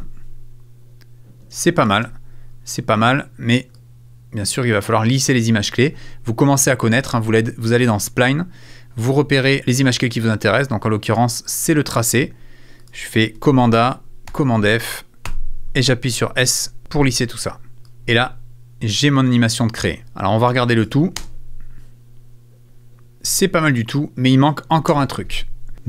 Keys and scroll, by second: 13.4 super+a, 14.3 super+f, 15.1 super+a, 15.2 super+s, 16.6 s, 18.0 space, 19.7 space, 21.2 space, 23.2 space, 24.9 space, 25.7 super+s.